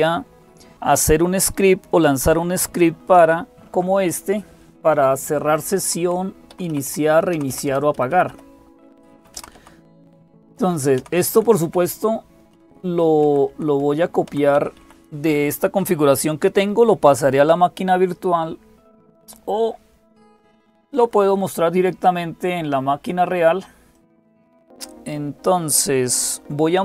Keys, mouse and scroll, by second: 0.0-26.8 typing, 2.9 super+x, 5.4 Down, 5.6 Down, 5.8 Down, 6.3 Up, 6.5 Up, 6.7 Up, 7.1 super+Down, 7.7 super+Down, 8.1 super+Up, 9.1 super+Up, 9.8 Down, 10.8 Up, 11.5 Down, 23.7 click.